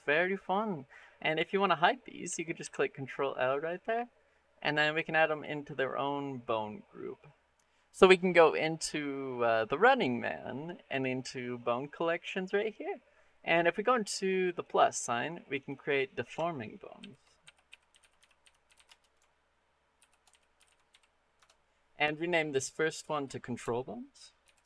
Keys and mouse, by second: 0.7 click, 1.4 click, 2.4 ctrl+l, 5.1 click, 7.4 click, 14.4 click, 15.4-21.2 drag, 22.9-24.6 drag.